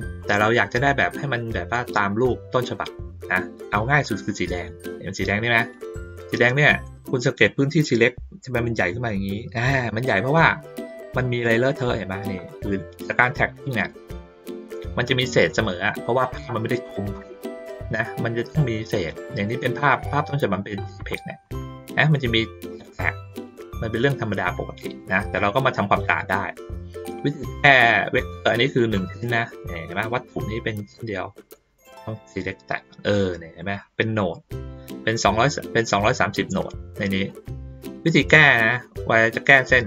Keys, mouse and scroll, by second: 4.0-5.7 drag, 10.0 ctrl+middle click, 10.4 ctrl+middle click, 11.7 ctrl+middle click, 12.1 ctrl+middle click, 12.4 ctrl+middle click, 13.2 ctrl+middle click, 14.8 ctrl+middle click, 19.2 ctrl+middle click, 20.0 middle click, 20.5 ctrl+middle click, 20.9 ctrl+middle click, 23.2 ctrl+middle click, 23.9 ctrl+middle click, 24.5 middle click, 25.4 ctrl+middle click, 26.1 ctrl+middle click, 27.2 ctrl+middle click, 27.6 middle click, 28.4-29.7 drag, 30.9 click, 31.9 click, 39.5 click.